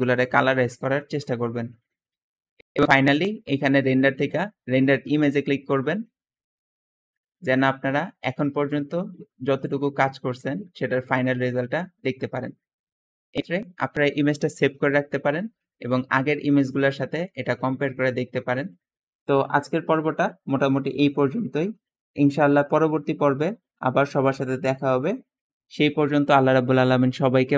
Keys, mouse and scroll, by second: 2.7 Escape, 13.5 click, 14.7-15.4 scroll up 2, 15.6 middle click.